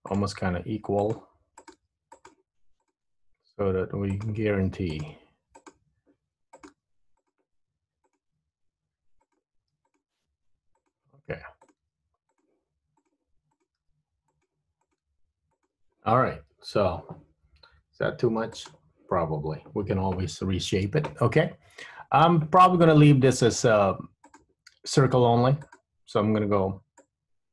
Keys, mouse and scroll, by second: 0.2 click, 0.5 g, 1.7 click, 1.9 g, 2.9 click, 3.0 g, 5.0 click, 5.3 g, 6.7 click, 6.8 g, 8.3 click, 8.4 g, 9.9 click, 10.4 g, 11.8 click, 11.9 g, 13.2 click, 13.6 click, 13.9 g, 14.9 click, 15.2 g, 18.0 g, 21.0 Tab, 24.4 click, 25.8 click, 27.1 click.